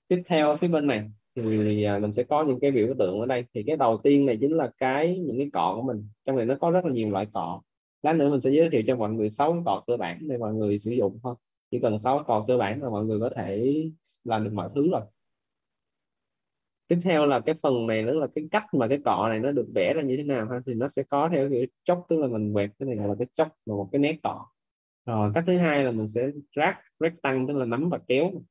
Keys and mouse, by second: 5.1 click, 22.1 click, 24.0 ctrl+z, 24.5 click, 27.4 click.